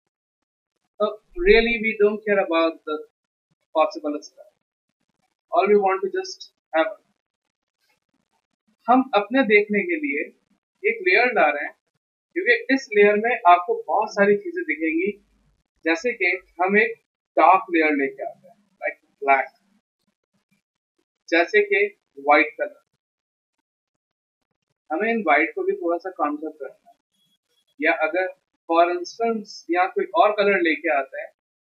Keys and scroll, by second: 16.7 d, 18.5 alt+BackSpace, 20.1 z, 29.7 ctrl+BackSpace.